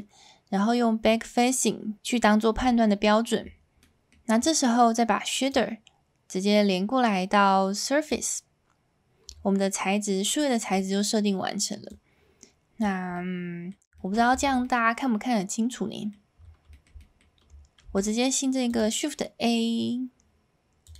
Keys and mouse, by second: 3.7 middle click, 6.2-11.6 drag, 12.0 click, 13.1 middle click, 13.9 shift+middle click, 14.3 Tab, 14.6-16.1 middle drag, 16.7 middle drag, 17.0 middle drag, 20.8 click.